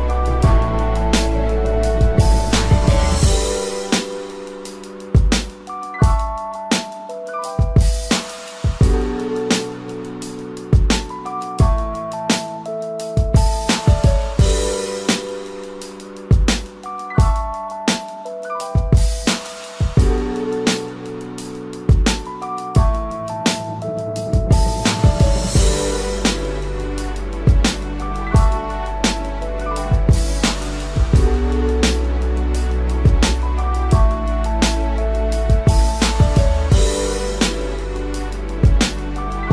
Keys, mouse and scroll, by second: 1.7 double click, 3.4 space, 6.2 ctrl+-, 6.4 ctrl+-, 6.7 ctrl+-, 7.0 ctrl+-, 8.7 ctrl+-, 9.1 ctrl+-.